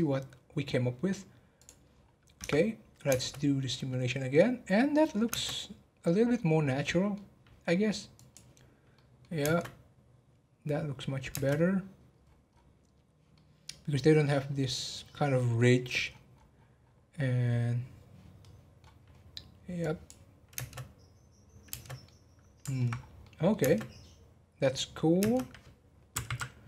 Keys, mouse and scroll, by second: 1.9 scroll down 5, 2.4 Tab, 5.3 space, 5.4-6.4 middle drag, 6.4 scroll up 3, 6.7-8.2 middle drag, 8.2-8.9 drag, 8.9-9.4 middle drag, 9.4 space, 11.3 space, 11.9 scroll down 1, 12.2-12.7 scroll up 10, 13.3-16.0 middle drag, 16.0-16.7 scroll up 10, 18.4-19.8 middle drag, 19.8-20.5 drag, 20.5 space, 22.0-22.9 middle drag, 22.9 scroll down 2, 23.2-23.6 middle drag, 23.6 space, 25.2 space, 26.2 Right, 26.3 Right.